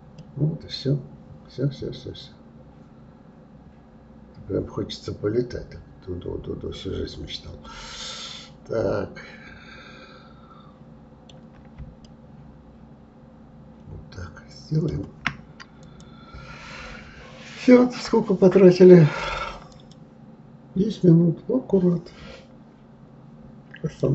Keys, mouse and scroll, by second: 0.2-3.2 middle drag, 12.0-15.0 shift+middle drag, 15.8 click.